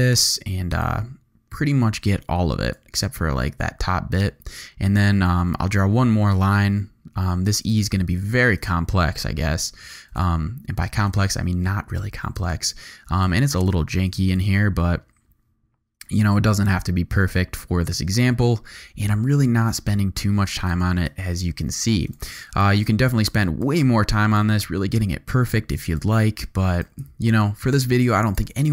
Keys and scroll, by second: 3.3 v, 5.2 g, 10.7 v, 11.4 z, 12.4 alt+space, 13.3 space, 13.7 z, 14.6 v, 28.5 super+z.